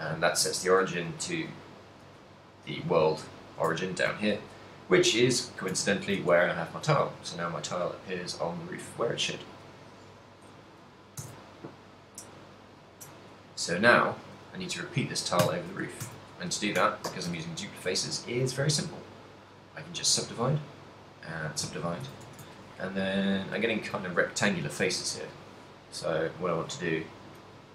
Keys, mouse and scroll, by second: 0.4 shift+middle click, 1.6 right click, 3.2 middle click, 3.6 shift+middle click, 3.8 ctrl+middle click, 4.4 g, 5.3 right click, 5.9 ctrl+middle click, 6.2 middle click, 7.2 shift+middle click, 7.4 middle click, 10.1 middle click, 11.3 ctrl+a, 13.9 middle click, 14.7 right click, 15.4 Tab, 16.1 a, 17.7 w, 20.2 w, 22.1 a, 22.3 z, 22.6 ctrl+click, 23.7 ctrl+click, 24.8 click, 24.9 a, 25.5 ctrl+click, 26.5 ctrl+click, 27.5 ctrl+click.